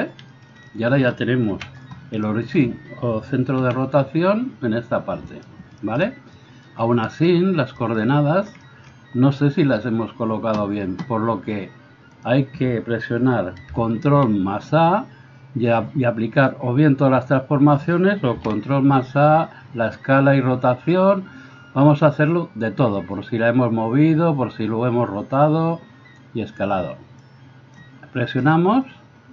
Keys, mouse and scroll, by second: 1.6 KP_1, 3.7 r, 12.3-29.3 middle drag, 14.1 ctrl+a, 18.4 ctrl+a.